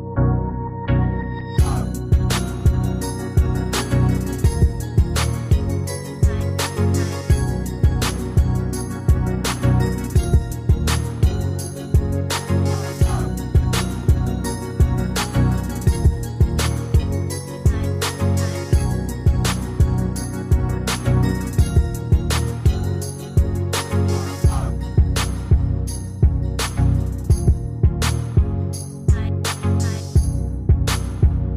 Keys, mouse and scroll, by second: 4.0 Escape, 19.6 Escape, 24.8 ctrl+z.